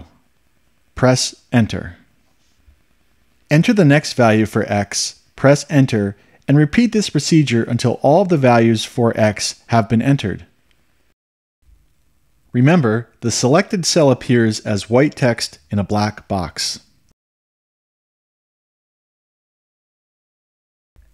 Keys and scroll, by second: 1.5 Return, 4.7 1, 6.6 Return, 8.2 2, 9.8 Return, 12.8 Up, 16.7 Up.